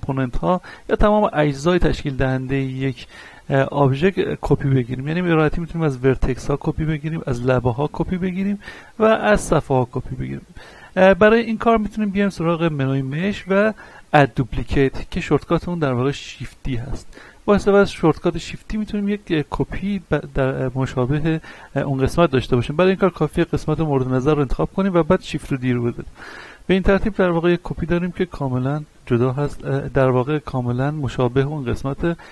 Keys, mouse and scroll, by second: 6.1 right click, 7.5 ctrl+Tab, 7.9 click, 8.3 right click, 9.1 ctrl+Tab, 9.6 click, 10.1 right click, 11.2-11.8 scroll up 1, 12.8 click, 18.3-18.7 scroll down 1, 18.8-23.5 shift+middle drag, 23.5 shift+right click, 24.1 middle click, 25.3 shift+d, 25.7 right click, 26.3 middle click, 27.1 click, 28.0-29.9 middle drag, 30.4 scroll up 1, 30.9 shift+middle click.